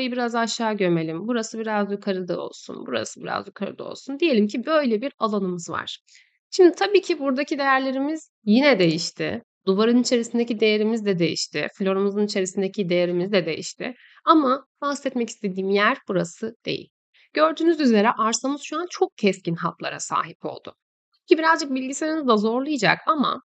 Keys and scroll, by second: 4.3 Escape.